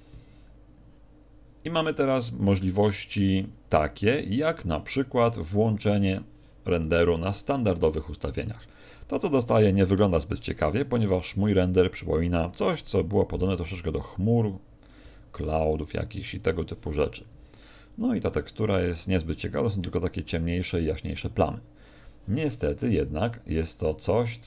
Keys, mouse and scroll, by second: 4.3 click, 9.5 Escape, 9.5-10.6 scroll down 1, 10.6 KP_0, 12.1 right click, 13.4 g, 14.9 click, 15.0 g, 16.4 click.